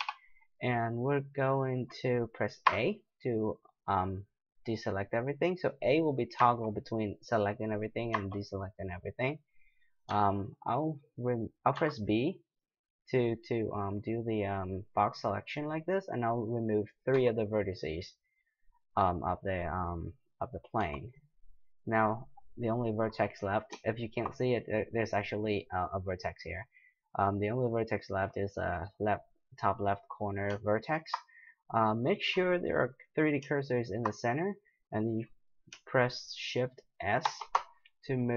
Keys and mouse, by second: 0.0 KP_7, 2.7 a, 6.4 a, 8.1 a, 10.1 b, 11.7 b, 17.1 x, 20.8 x, 22.4-34.7 right drag, 37.2 shift+s.